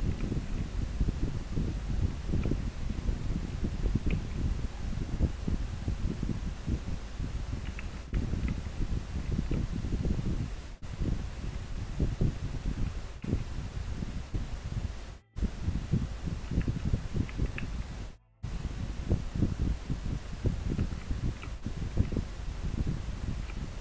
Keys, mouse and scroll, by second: 1.3 scroll up 1, 8.4 scroll down 1, 11.1 scroll up 1, 17.3 scroll up 1, 21.0 scroll down 1, 22.5 scroll up 1, 23.2 scroll down 1.